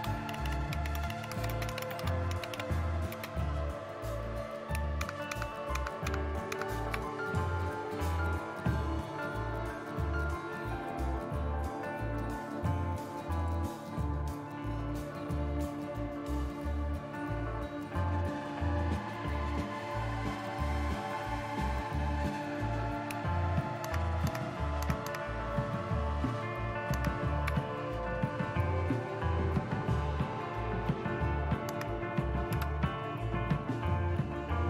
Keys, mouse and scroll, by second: 0.0-3.1 typing, 5.0 super+Left, 5.1-6.5 typing, 8.6-10.1 scroll down 1, 10.1-14.0 scroll down 1, 14.0-15.3 scroll up 1, 15.3-16.4 scroll up 1, 16.4-17.6 scroll up 1, 19.1-23.8 drag, 23.9 super+Right, 24.3 super+Right, 24.8-26.9 super+Right, 31.7 Right, 32.5 Return.